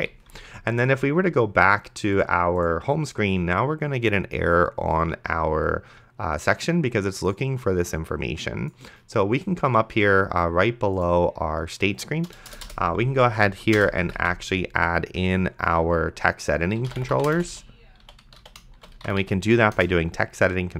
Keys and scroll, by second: 12.8 Return, 14.0 Up, 14.2 Tab, 16.6-19.7 typing, 19.8 Return.